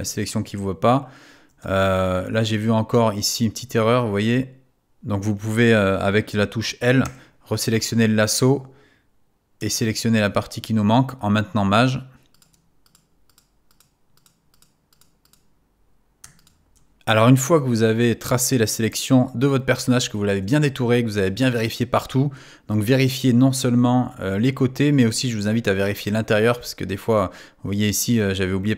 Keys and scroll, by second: 4.9 super+z, 7.0 |.